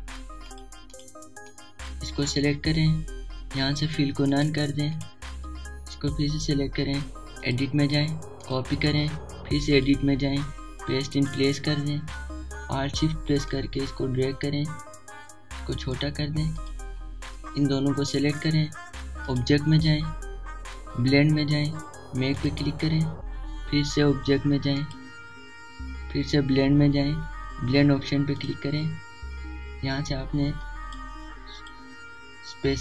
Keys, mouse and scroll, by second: 14.6-20.3 alt+shift+drag, 23.4 click, 25.8 click, 29.4 click, 31.6 click.